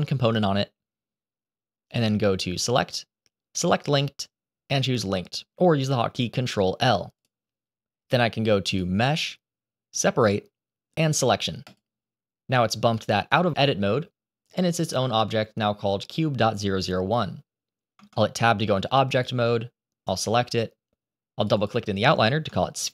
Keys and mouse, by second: 2.0-7.2 drag, 8.8-11.7 drag, 17.9 Tab, 19.1 click, 21.3 click, 22.4 shift+middle click.